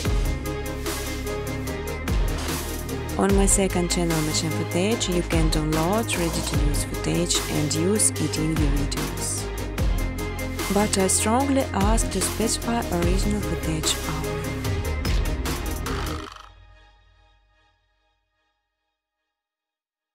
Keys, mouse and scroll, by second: 0.0-2.2 typing, 4.5 click, 4.9 ctrl+c, 5.1 ctrl+d, 6.7 click, 7.5 click, 10.3 shift+click, 10.7 right click, 12.8 click, 13.1 space, 14.0 space, 14.6 click, 14.8 right click, 16.2 click, 17.4 click, 17.5-18.7 typing, 18.9 click, 19.1 click.